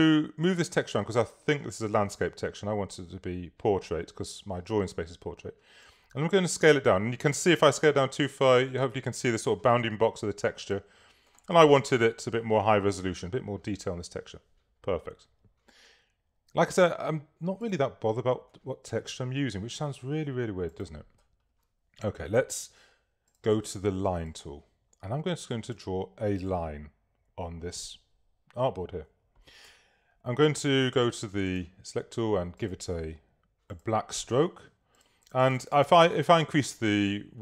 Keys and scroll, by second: 29.6 v.